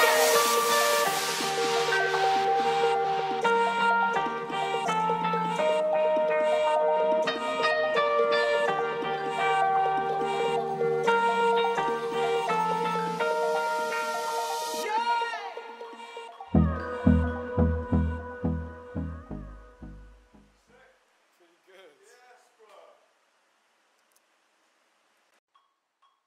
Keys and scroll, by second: 0.1 [, 9.8 ctrl+alt+e, 19.8 Up, 21.3 Down.